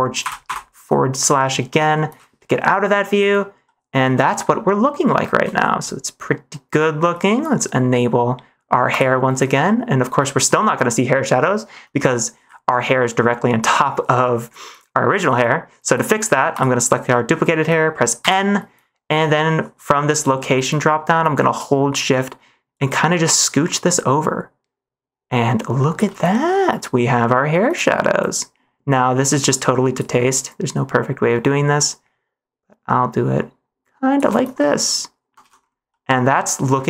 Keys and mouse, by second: 0.1 /, 0.4 /, 2.5 middle click, 3.1 -, 3.5-4.8 middle drag, 5.4 shift+middle click, 8.8 click, 9.5 middle click, 10.9 middle click, 16.4 click, 18.1 n, 22.8-25.9 shift+drag, 26.3 middle click, 27.2 middle click, 28.3-29.9 shift+drag, 30.5-34.1 shift+drag, 34.5-35.2 middle drag, 35.4 ctrl+s, 35.8 middle click.